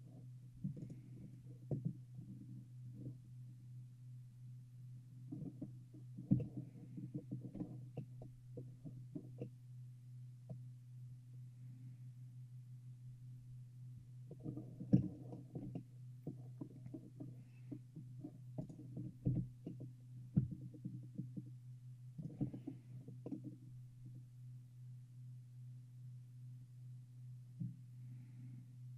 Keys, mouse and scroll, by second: 0.9-2.8 right drag, 5.5-11.3 middle drag, 14.7-18.2 middle drag, 18.7-20.7 right drag, 19.4 e, 22.6 middle click, 23.4-25.2 middle drag.